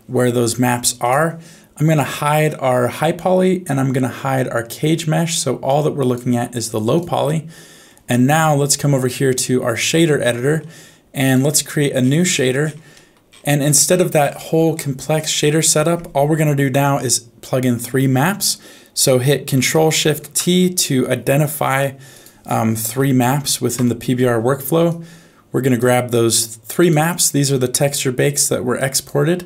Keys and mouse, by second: 2.9 click, 5.6 click, 7.3 middle click, 8.7-9.8 drag, 13.0 middle click, 14.8 middle click, 15.6 click, 20.2 ctrl+shift+t.